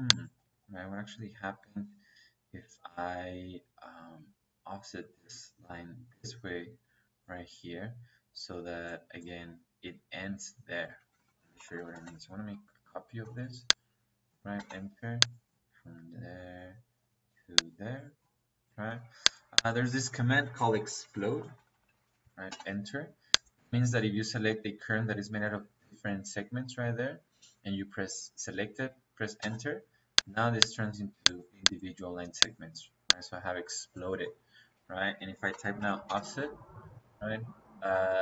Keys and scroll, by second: 0.6 Escape, 1.4 Escape, 10.9 Escape, 11.4-12.0 typing, 14.4 -, 17.6 Escape, 18.7 Escape, 19.8 Escape, 20.9-22.4 typing, 29.3 space, 33.2 Escape, 34.5 Escape, 35.4 o, 35.7 f, 36.0 space.